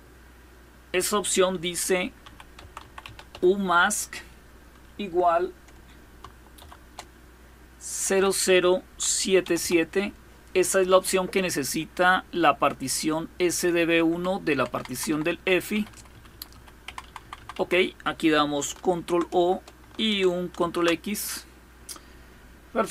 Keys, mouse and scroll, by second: 1.6-3.5 typing, 6.2 typing, 7.6 typing, 9.1 typing, 13.7 Down, 14.2 Down, 14.4 Down, 14.5 Down, 14.7 Down, 14.9 Down, 15.4 Up, 15.6 Up, 15.7 Up, 15.9 Up, 16.2 Up, 16.5 Down, 16.7 Down, 16.8 Down, 17.0 Down, 17.2 Down, 18.6 ctrl+o, 19.1 Return, 20.2 ctrl+x.